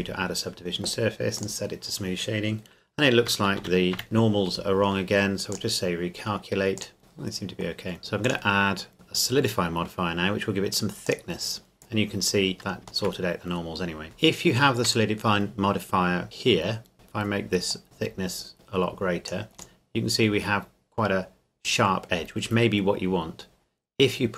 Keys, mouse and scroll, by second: 1.4 click, 3.2 Tab, 3.6 a, 3.9 a, 7.0 middle click, 7.9-8.2 scroll up 1, 8.2 click, 11.0 click, 12.8 shift+middle click, 13.8-14.2 scroll up 3, 14.1 shift+Num_Lock, 14.6 shift+middle click, 14.8-16.3 scroll up 2, 16.9 middle click, 17.7 click, 19.8 middle click.